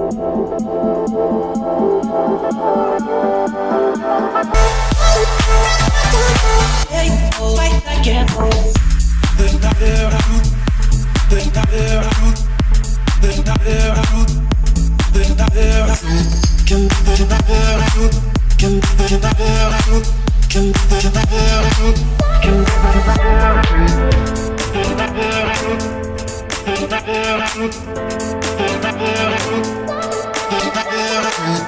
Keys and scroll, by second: 2.4 Escape, 8.3 Escape, 16.0 Escape, 17.3 o, 23.4 Escape.